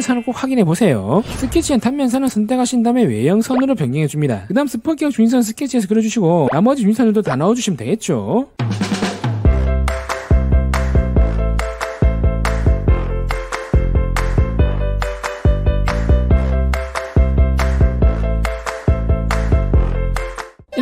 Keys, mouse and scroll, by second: 1.6 Tab, 1.7 click, 2.8 shift+click, 3.7 click, 4.9 middle click, 5.3 click, 5.7 click, 5.9 d, 6.0 click, 6.3 click, 6.5 click, 6.7 2, 6.8 click, 7.0 click, 7.3 click, 8.1 click, 8.9 middle click, 8.9 scroll up 1, 9.3 1, 9.6 click, 9.7 middle click, 9.7 scroll up 1, 10.5 click, 10.8 d, 10.9 click, 11.1 click, 11.3 click, 11.5 2, 11.6 click, 11.8 click, 12.2 click, 13.4 click, 13.6 scroll up 1, 13.8 right click, 14.1 click, 14.3 middle click, 14.6 click, 15.0 click, 15.2 click, 15.6 click, 16.3 right click, 16.8 click, 17.4 click, 17.7 click, 18.7 click, 19.2 click, 19.4 click, 19.6 middle click, 19.9 click, 20.3 middle click, 20.6 click, 20.7 click.